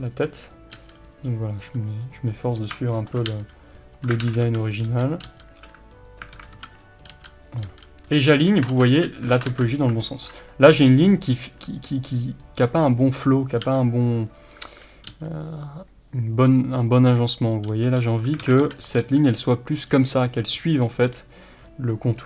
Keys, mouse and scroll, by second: 0.8 g, 1.6 click, 3.3 g, 4.0 click, 4.2 alt+a, 4.7 b, 5.3 g, 6.4 alt+a, 6.8 b, 7.7 g, 8.3 r, 8.7 ctrl+z, 9.8 scroll up 1, 10.1-13.5 shift+middle drag, 13.5 click, 13.7 g, 14.9 click, 15.1 g, 17.5 click, 17.7 g, 18.4 alt+a, 18.8 b, 19.9 g, 20.4 click, 20.4 r, 20.9 click.